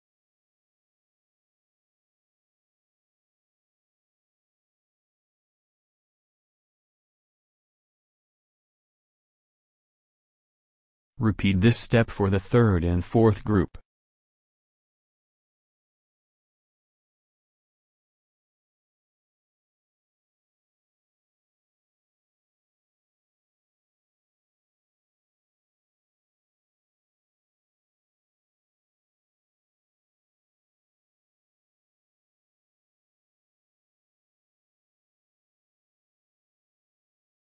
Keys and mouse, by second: 0.6-1.7 drag, 5.3-6.4 drag, 9.6-11.4 drag, 11.4 shift+a, 14.0 alt+Tab, 16.3 alt+Tab, 21.5 click, 25.8-27.3 drag, 27.3 shift+a, 32.6 alt+Tab.